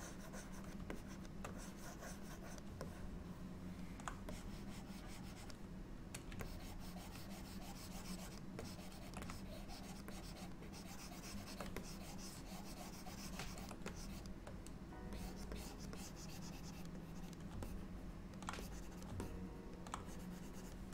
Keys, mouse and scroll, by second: 1.0 shift+click, 1.6 click, 2.9 middle click, 4.4 click, 6.5 ctrl+click, 8.7 ctrl+click, 9.3 click, 10.2 shift+click, 10.4 shift+click, 10.7 ctrl+click, 11.9 ctrl+click, 14.0 shift+click, 15.2 click, 15.6 click, 16.0 click, 17.1 click, 17.7 middle click, 18.7 click, 19.3 middle click, 20.1 click, 20.1 middle click.